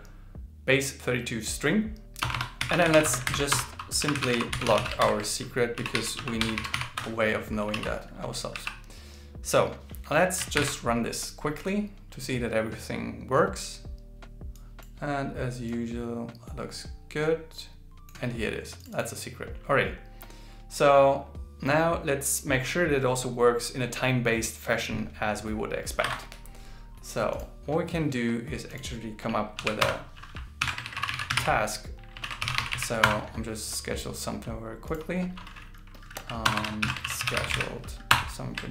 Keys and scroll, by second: 3.3 alt+8, 5.0 shift+8, 7.7 super+s, 10.6 ctrl+shift+r, 30.6 alt+l, 30.8 shift+e, 32.2 shift+s, 36.8 alt+l, 37.1 shift+s.